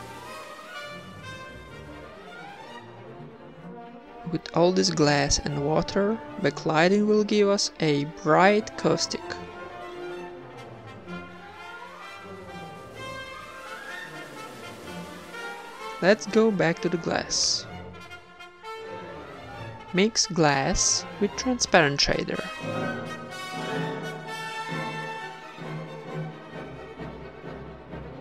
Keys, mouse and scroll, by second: 0.7 s, 1.7 Tab, 2.0 ctrl+r, 2.2 ctrl+r, 2.8 ctrl+Tab, 2.8 a, 3.5 ctrl+a, 3.5 Tab, 3.8 ctrl+b, 4.5 x, 4.9 Tab, 5.2 ctrl+s, 7.9 click, 8.4 ctrl+s, 8.9-10.1 middle drag, 10.1 ctrl+s, 10.3 shift+a, 13.0 r, 13.0 g, 13.5 g, 16.2 g.